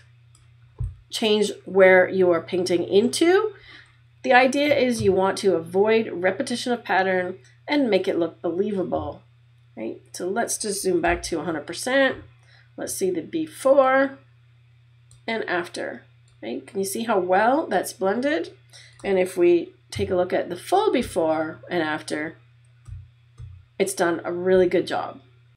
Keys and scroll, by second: 11.1 super+-, 19.9 \, 22.9 \.